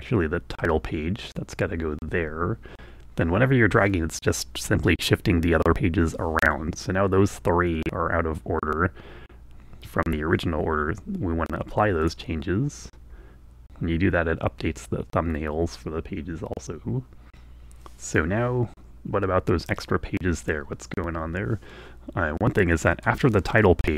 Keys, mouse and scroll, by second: 0.0-10.9 drag, 11.6-23.4 drag.